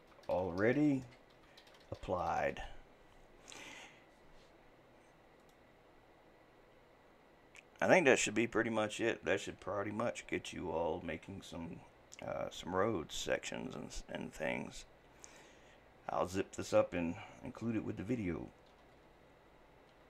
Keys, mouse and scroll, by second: 1.9 p.